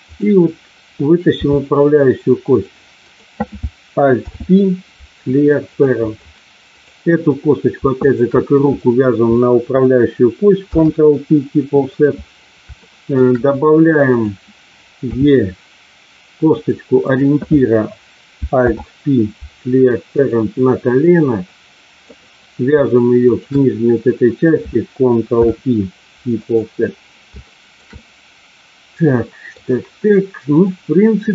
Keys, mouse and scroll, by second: 0.0 click, 1.3 e, 2.4 click, 3.0 click, 4.2 alt+p, 6.7 click, 7.9 shift+click, 10.7 ctrl+p, 12.7 shift+middle click, 14.0 click, 15.0 e, 16.4 click, 17.0 click, 18.7 alt+p, 21.0-22.0 drag, 25.3 ctrl+p, 27.4 middle click, 27.9-29.5 middle drag, 30.7-31.3 middle drag.